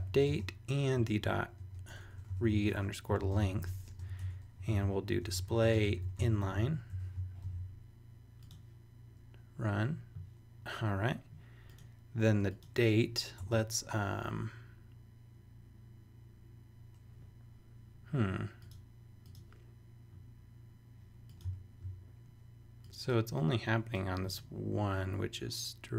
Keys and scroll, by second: 0.0-7.4 typing, 7.4 super+s, 13.4 Return.